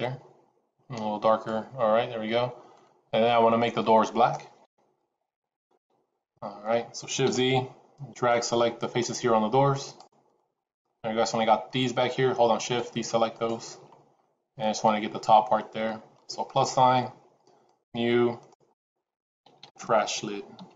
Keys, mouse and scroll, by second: 2.7 middle click, 4.5 KP_1, 5.7 KP_Decimal, 7.5 shift+z, 8.1 click, 10.7 middle click, 12.0 middle click, 12.5 shift+click, 13.4 shift+click, 13.9 scroll down 2, 14.1 middle click, 16.4 click, 17.5 click, 18.3 click, 18.6 click.